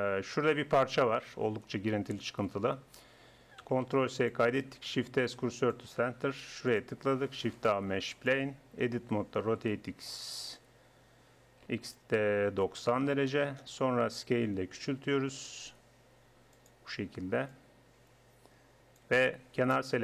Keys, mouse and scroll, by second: 3.9 ctrl+s, 4.9 shift+s, 7.4 shift+a, 9.0 Tab, 9.5 r, 14.8 s, 17.5-20.0 drag.